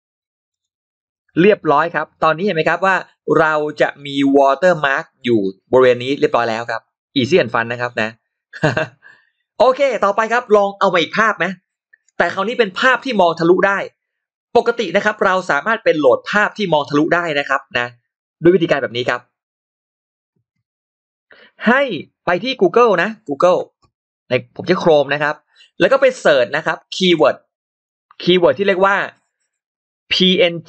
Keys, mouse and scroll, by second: 0.3 click, 1.7 click, 1.7 scroll down 1, 2.0 click, 2.5 scroll up 1, 20.2 click, 21.5 click, 24.5 click, 28.7 click.